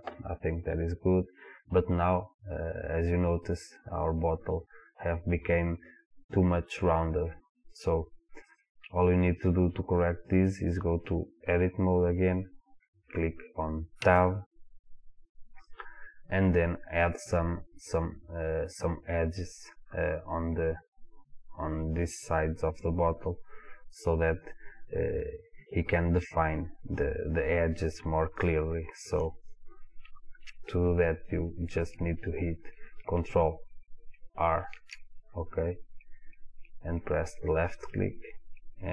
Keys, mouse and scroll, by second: 2.4 click, 8.5 click, 14.3 Tab, 15.3-16.4 scroll up 1, 24.1-24.8 scroll down 1, 24.8-25.3 scroll up 1, 29.6-31.8 scroll down 1, 32.3-33.8 scroll up 1, 34.4 ctrl+r.